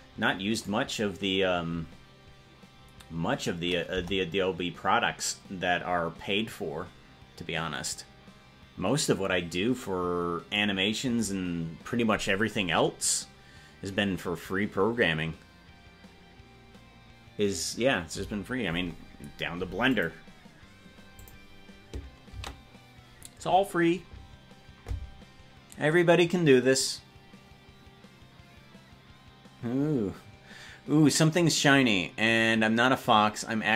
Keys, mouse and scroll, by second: 1.0 right click, 4.0 KP_0, 19.9 click, 25.8 ctrl+s.